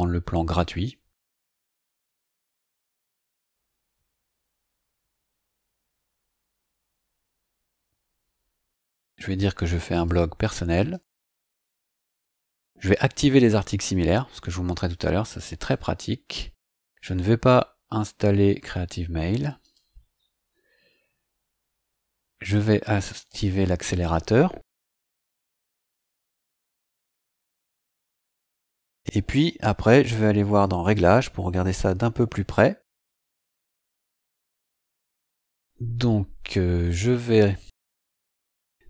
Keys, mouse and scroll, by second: 1.3 scroll up 1, 2.5 click, 9.9 click, 10.9 click, 15.6 click, 19.6 click, 23.2 click, 27.1 scroll down 1, 27.8 scroll down 1, 28.0-29.0 scroll up 3, 30.8 click, 37.3-38.8 scroll down 3.